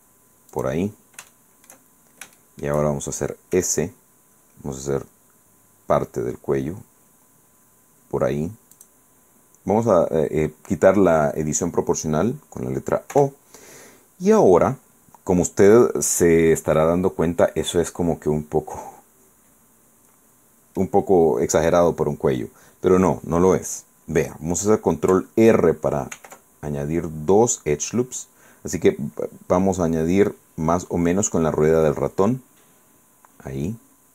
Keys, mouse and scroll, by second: 0.7 click, 1.4 shift+middle click, 2.3 shift+scroll down 1, 2.5 shift+middle click, 3.7 s, 8.9 click, 13.3 o, 14.8-21.1 middle drag, 22.4 scroll up 2, 26.3 ctrl+r, 27.5 scroll up 2, 29.8-30.3 scroll down 2, 33.2 scroll up 2.